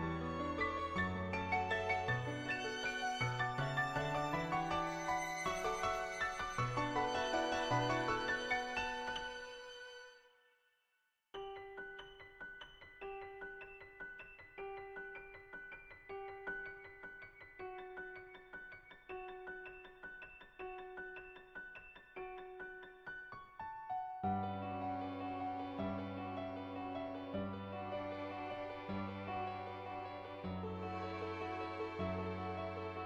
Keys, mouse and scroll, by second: 0.2 [, 0.4 click, 1.0-2.5 drag, 2.6 click, 4.6 click, 4.6 ], 5.4 click, 6.5 ], 6.7 click, 7.5 click, 9.3-10.7 middle drag, 15.8 ], 15.8 click, 17.1-18.8 drag, 19.0-20.5 drag, 20.8 [, 21.0 click, 22.3 click, 23.0 click, 24.0 shift+click, 24.4 middle click, 24.9 middle click, 27.2 click, 27.8-29.0 drag, 29.4 [, 29.7 click, 30.1-31.2 drag, 31.2 ], 31.4 ], 31.5-32.9 drag.